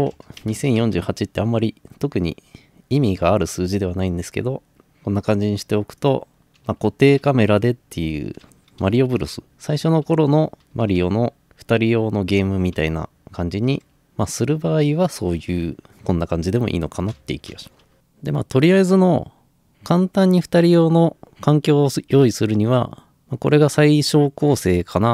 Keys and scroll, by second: 0.0-1.1 typing, 4.6-14.5 typing, 17.2 Escape.